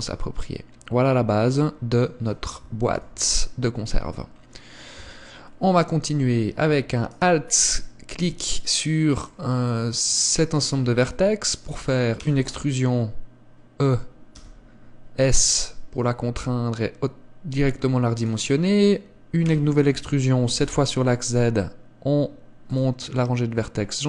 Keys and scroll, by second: 3.0 KP_1, 5.1 Tab, 12.3 e, 19.6 e.